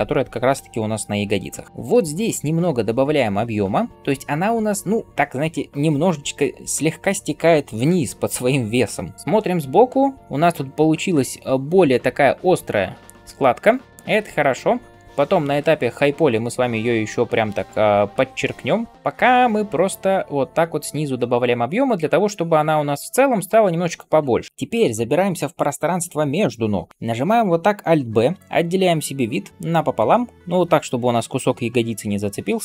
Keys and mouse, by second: 1.8-10.5 drag, 1.8-10.5 middle drag, 1.8-10.5 right drag, 24.5 ctrl+KP_1, 28.2 alt+b.